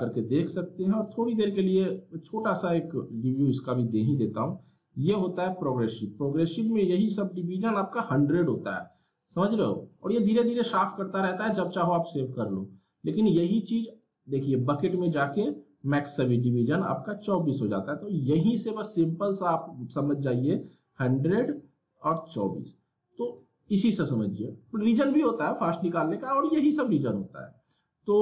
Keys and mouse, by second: 4.4-8.9 drag, 12.3 click.